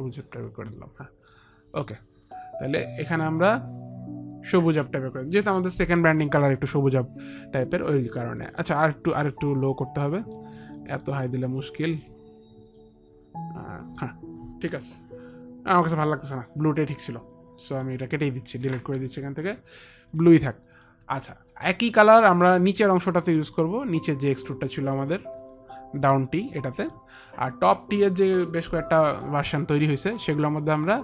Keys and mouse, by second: 1.9 click, 3.6 click, 8.5 click, 8.8 click, 10.4 click, 11.0 click, 17.8 click, 20.2 click, 20.9 Delete, 20.9 click, 23.5 Delete, 23.5 click, 24.5 Delete, 25.3 click, 27.0 click, 30.2 click.